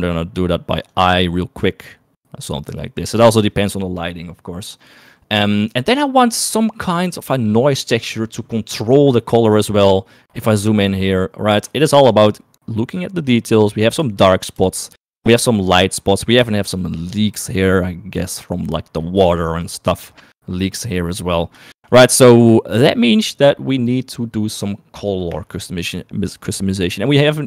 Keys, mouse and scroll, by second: 0.4 click, 12.5 shift+middle click, 13.7 shift+middle click, 15.2 shift+middle click, 16.7 shift+middle click, 16.9 shift+middle click, 18.8 shift+middle click, 19.8 shift+middle click, 21.9 shift+middle click, 26.3-27.4 scroll up 2.